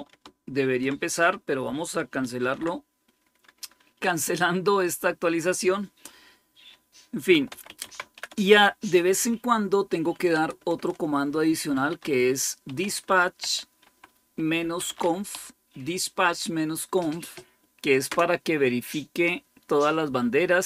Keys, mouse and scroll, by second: 2.3 ctrl+c, 7.2-8.5 typing, 10.2 Return, 10.5 Return, 11.4-15.7 typing.